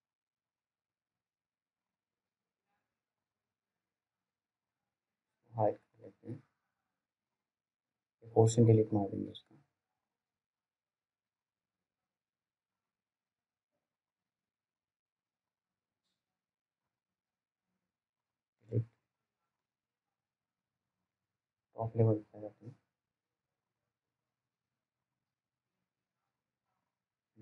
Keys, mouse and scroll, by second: 0.2 right click, 5.1 click, 5.6 scroll down 1, 5.9 alt+middle click, 6.7 click, 10.1-10.8 scroll up 1, 10.8 right click, 11.4 click, 18.6 Delete, 19.9 right click, 21.9 click, 23.7 right click, 24.4 click, 24.5 click, 25.0 right click, 26.5 click, 27.2 scroll down 1.